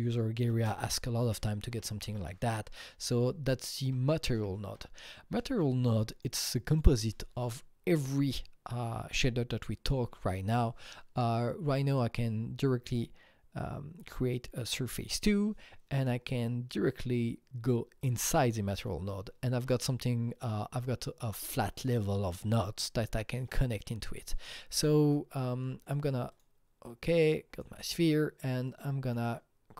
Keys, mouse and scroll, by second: 0.5 ctrl+space, 1.0-2.8 typing, 3.8 Down, 4.3 Up, 4.5 typing, 4.6 Return, 5.6 click, 6.4-9.3 drag, 11.9 click, 14.1 Return, 17.4 double click, 18.0 click, 18.1 double click, 26.3 click, 27.5 click, 28.7-29.7 drag.